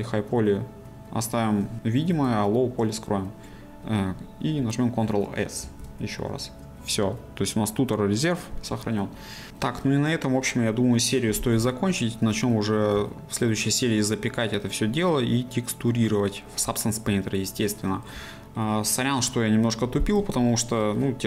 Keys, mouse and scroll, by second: 2.1-11.9 drag, 11.9-16.6 shift+middle drag, 17.2-20.8 shift+middle drag, 20.8 scroll up 2, 21.0-21.2 middle drag.